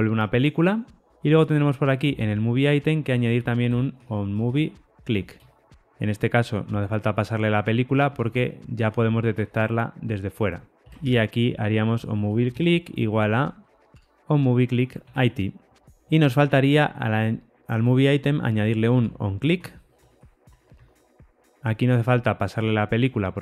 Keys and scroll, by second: 9.2 ctrl+shift+Left, 12.5 Return, 13.8 Tab, 15.8 super+z, 18.8 Tab, 20.7 alt+super+l.